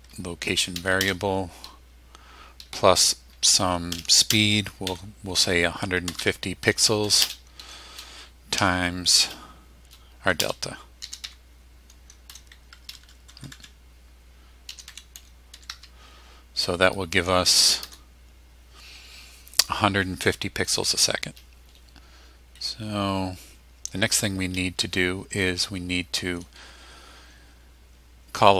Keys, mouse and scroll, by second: 0.1 Tab, 1.0 space, 3.3-7.2 typing, 8.5 shift+8, 10.4-13.1 typing, 13.0 Insert, 14.4-16.2 typing, 17.8 Return.